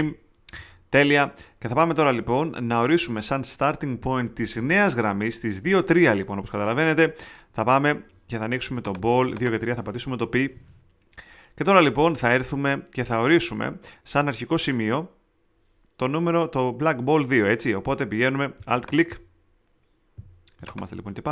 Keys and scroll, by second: 10.2 shift+π.